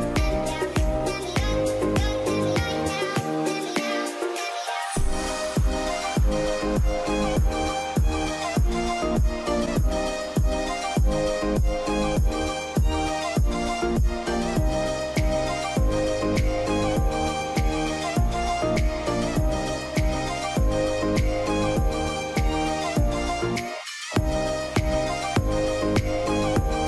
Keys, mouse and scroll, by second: 0.7 scroll up 1, 1.0 middle click, 1.6-2.2 scroll up 1, 2.2 scroll down 1, 3.1 middle click, 4.8 double click, 8.7 double click, 10.2 Return, 15.7 Return.